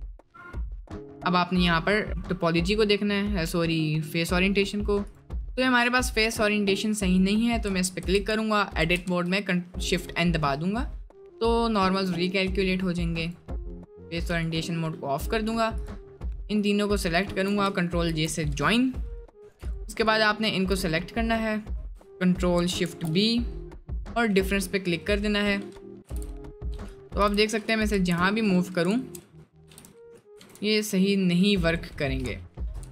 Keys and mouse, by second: 1.5 middle click, 3.7 middle click, 7.7 Tab, 8.0 a, 8.8 shift+n, 9.1 Tab, 12.1-14.0 drag, 14.0 middle click, 14.7 middle click, 18.1 ctrl+j, 22.9 ctrl+shift+b, 24.6-24.9 middle drag, 25.9 middle click, 26.1 g, 27.1 h, 27.3 c, 28.0 ctrl+z, 29.1 ctrl+z, 29.7 g, 30.4 s, 32.3 ctrl+z.